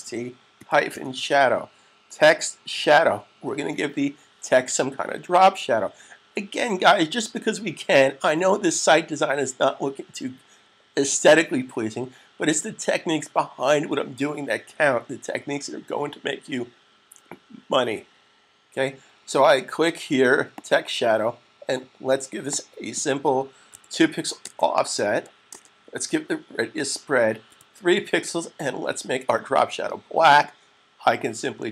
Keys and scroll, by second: 0.0-1.3 typing, 23.6 typing, 24.7 typing, 27.3 typing.